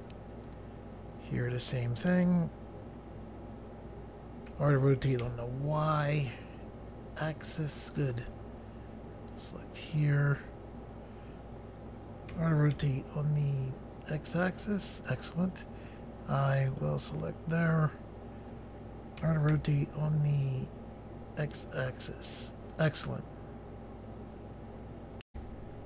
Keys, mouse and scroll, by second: 0.5 click, 4.5 r, 5.2 y, 7.9 right click, 9.3 click, 12.3-12.8 typing, 15.0 right click, 16.7 click, 19.2-19.5 typing, 22.7 right click, 25.3 Pause.